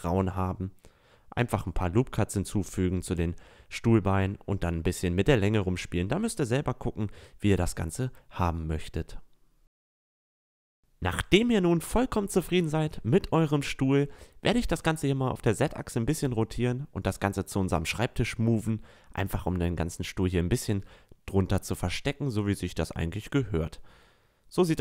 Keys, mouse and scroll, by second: 0.0 middle click, 0.9 middle click, 1.9 s, 2.5 click, 2.9 Tab, 3.7 click, 4.1 drag, 4.2 Tab, 4.2 middle drag, 4.7 a, 5.0 a, 5.5 Tab, 6.9 ctrl+z, 7.0 ctrl+z, 7.4 click, 8.3 click, 8.4 Tab, 8.8 Tab, 9.5 middle click, 10.1 click, 10.2 a, 10.4 middle click, 10.4 Tab, 10.5 Tab, 10.6 a, 10.9 a, 12.0 right click, 12.0 r, 14.8-17.8 drag, 17.3 a, 17.8-18.4 middle drag, 18.6 middle drag, 19.2-19.5 right drag, 19.5 r, 21.8 click, 22.5 a, 23.5-24.1 middle drag.